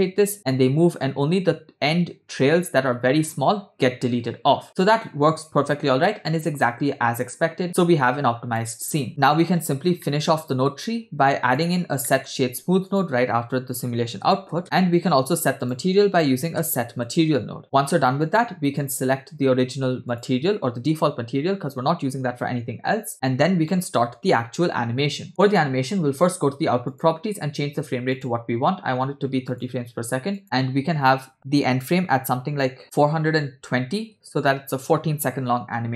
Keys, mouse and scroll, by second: 9.0 space, 9.5-10.0 scroll down 2, 10.0 middle click, 11.3 click, 11.8 scroll up 2, 12.1 shift+middle click, 12.3 shift+a, 14.6 middle click, 14.6 click, 14.8 scroll up 1, 14.9 shift+a, 18.2 click, 18.8-20.3 drag, 23.9-25.3 middle drag, 23.9-24.9 scroll down 1, 26.9 click, 28.1-29.7 drag, 30.4-34.1 drag.